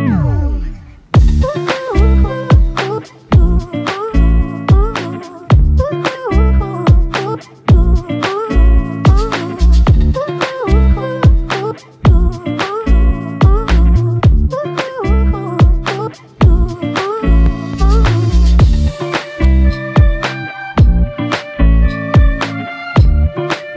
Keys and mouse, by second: 1.4 alt+click, 2.5 double click, 6.2 alt+click, 7.3 double click, 7.9 alt+click, 8.7 typing, 10.1 double click, 11.7 alt+click, 13.1 ctrl+alt+click, 14.2 f, 15.5 double click, 17.1 ctrl+z, 18.0 alt+click, 19.4 double click, 21.0 alt+click.